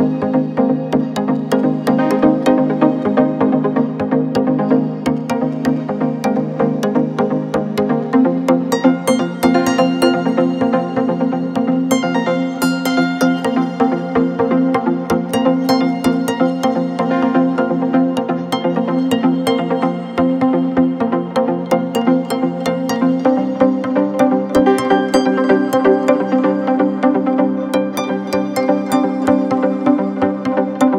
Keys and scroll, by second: 4.7 ctrl+t, 25.7 Return.